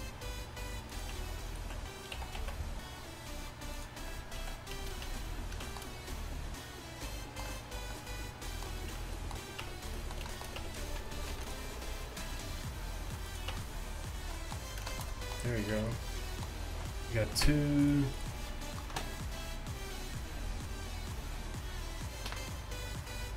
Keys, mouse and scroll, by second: 4.5-5.1 scroll down 1, 5.1 Tab, 5.1 s, 5.1 z, 9.0 Tab, 9.7 Tab, 10.6 Tab, 11.4 ctrl+r, 13.6 Tab, 15.8 a.